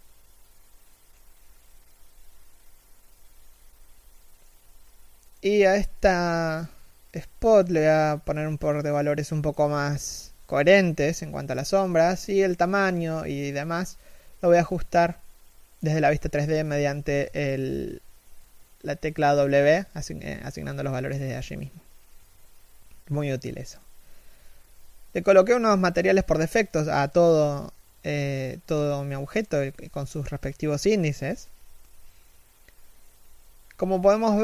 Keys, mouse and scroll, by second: 1.5 right click, 11.2 w, 14.3 scroll down 1, 14.3 w, 15.8 middle click, 16.2 KP_1, 16.5 scroll up 1, 16.7 a, 16.8-17.5 scroll down 1, 17.5 shift+middle click, 18.3 KP_1, 20.6-22.3 scroll up 1, 22.5-22.8 scroll down 1, 23.3 shift+middle click.